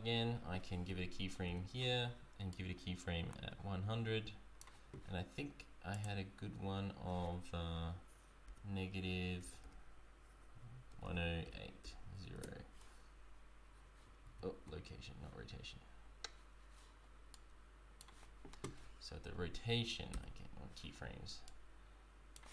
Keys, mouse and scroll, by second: 1.5 i, 2.6 right click, 4.9 right click, 6.1 click, 14.4 ctrl+z, 17.5 right click, 20.3 i, 21.7 right click.